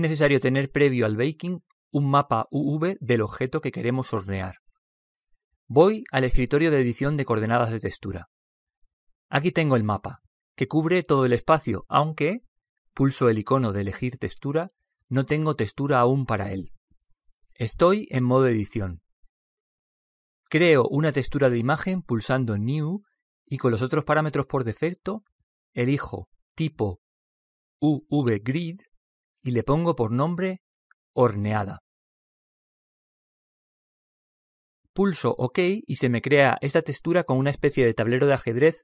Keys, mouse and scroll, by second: 6.4 click, 25.1-28.6 drag.